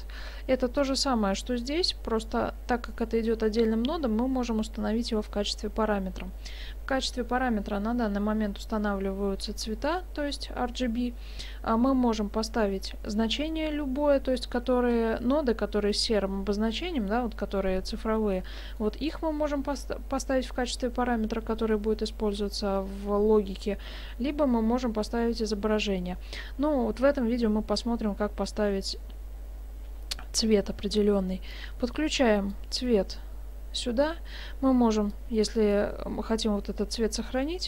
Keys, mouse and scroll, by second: 0.8 click, 14.9-18.0 scroll up 2, 18.4-18.9 scroll down 3, 18.8 middle click, 31.5 click, 35.2 click.